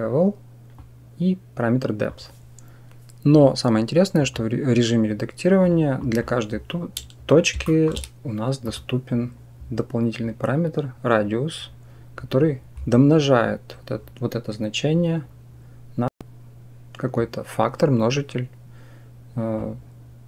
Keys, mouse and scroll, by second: 0.6-1.9 drag, 3.2-4.2 drag, 5.9 click, 7.5 shift+click, 8.5 click, 19.5-20.2 drag.